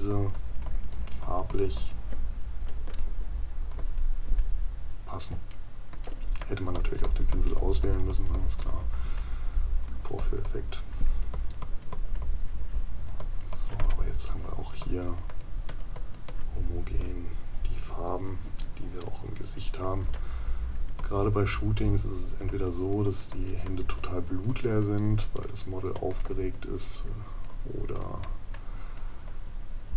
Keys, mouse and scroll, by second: 5.5 right click, 25.4 right click.